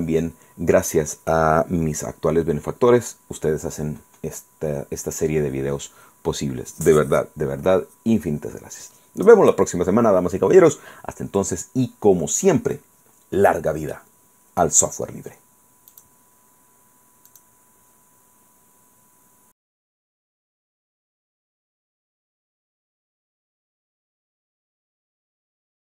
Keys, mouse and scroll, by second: 16.0 click, 17.4 click, 20.1 click, 21.4 click, 24.0 click, 25.1 click.